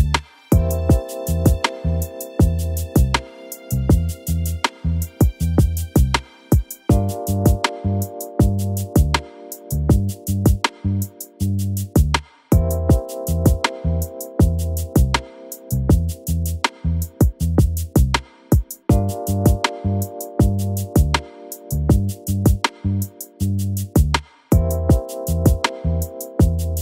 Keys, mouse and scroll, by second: 0.4 l, 0.8 z, 1.7 KP_Add, 3.6 shift+d, 4.1 KP_1, 4.4 s, 7.7 click, 8.1-9.2 scroll up 11, 12.3 KP_1, 12.5-12.8 scroll down 2, 12.8-13.3 scroll up 4, 13.3 click, 13.7-14.3 scroll up 1, 14.9 click, 16.0-16.4 scroll down 2, 16.4 click, 16.7-17.3 scroll up 1, 17.3 click, 17.9-18.3 scroll up 4, 18.3 g, 18.9 click, 19.3 g, 20.2 click, 20.8 g, 22.2-22.9 scroll down 8, 22.9 l, 23.8 g, 24.6-25.1 scroll down 5, 25.1 click.